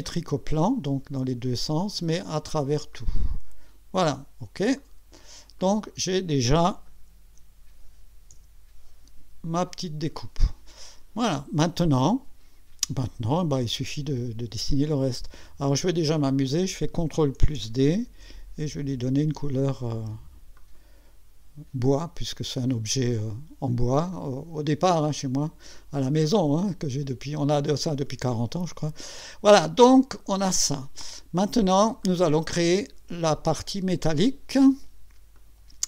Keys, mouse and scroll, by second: 0.0 click, 1.8 click, 2.9 click, 4.8 click, 5.6-6.6 drag, 8.3 1, 16.5 click, 17.9 ctrl+d, 19.1 click, 20.6 click, 22.0 click, 23.2 click, 24.1-30.9 drag, 32.0 click, 33.5 click, 35.3 click.